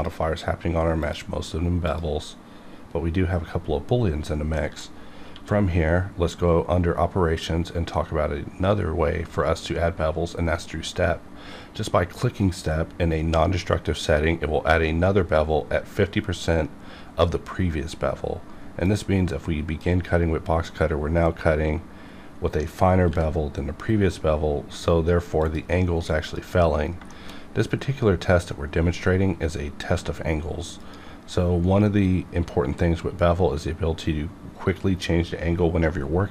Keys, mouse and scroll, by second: 4.6 middle click, 4.9 scroll up 1, 5.3 q, 14.1 click, 19.2-22.3 drag, 23.1 b, 24.0-25.4 scroll up 1, 25.4 click, 27.1 shift+middle click, 27.4-27.8 scroll up 1, 29.8 q, 30.8 click.